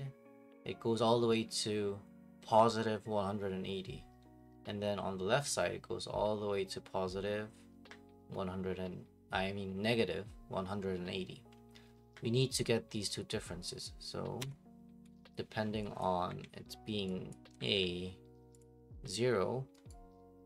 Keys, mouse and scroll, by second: 14.4 Escape, 15.3 click, 16.0 click, 16.3 Delete, 17.3 click, 17.6 right click, 18.6 click, 19.6 click.